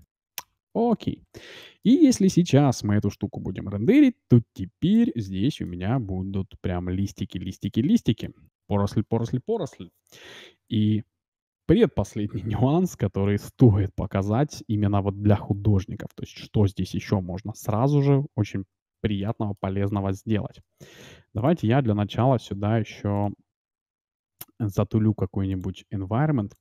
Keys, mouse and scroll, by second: 2.2 shift+z, 4.6-6.8 middle drag, 7.4-7.8 scroll down 1, 7.8-9.6 middle drag, 14.9-17.3 middle drag, 19.0-20.4 middle drag, 20.0 shift+z, 21.6-26.6 drag.